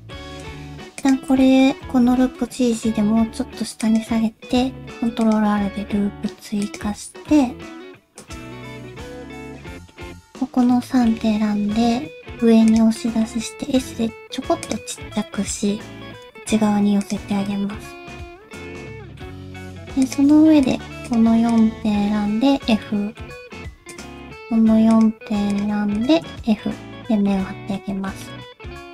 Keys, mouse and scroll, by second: 1.0 alt+click, 1.4 middle click, 2.0 g, 4.8 ctrl+r, 7.2 middle click, 8.2 click, 9.1 shift+middle click, 9.4 middle click, 10.3 middle click, 10.8 middle click, 11.6 e, 13.0 middle click, 13.5 s, 14.9 middle click, 16.2 g, 17.3 middle click, 18.1 s, 18.8 middle click, 20.0 click, 20.6 shift+click, 21.0 shift+click, 21.5 shift+click, 22.5 f, 22.8 middle click, 23.9 click, 24.2 middle click, 24.9 shift+click, 25.5 shift+click, 26.0 shift+click, 26.4 f, 26.6 middle click, 27.2 middle click, 28.0 shift+middle click, 28.4 middle click.